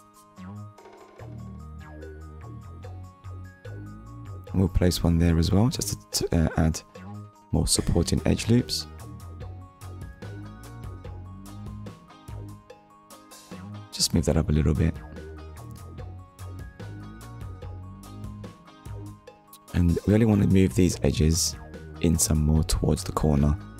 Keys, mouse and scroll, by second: 2.5 click, 5.0 click, 5.7 middle click, 7.1-7.5 scroll up 2, 7.6 shift+middle click, 8.0 middle click, 13.1 click, 13.5 middle click, 16.3 click, 16.8 middle click, 18.6 click, 19.1 shift+click, 19.6 shift+click.